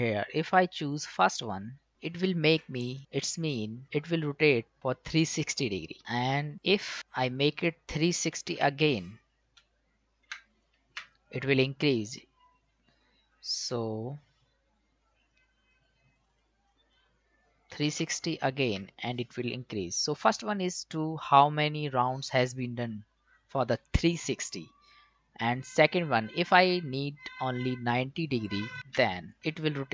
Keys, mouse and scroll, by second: 1.9 click, 2.9 click, 7.0 click, 9.6 BackSpace, 16.2 click, 27.5 click.